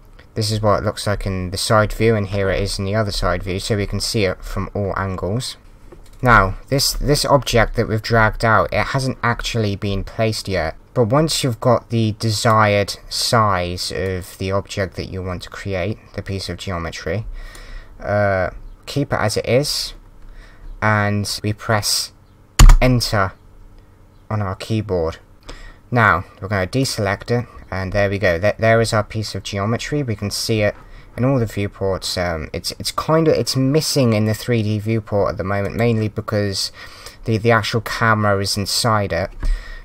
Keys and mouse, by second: 10.7 click, 14.0 click, 15.0 click, 22.6 KP_Enter, 23.6 Return, 25.3 click, 26.8 click, 27.8 click, 35.6 click.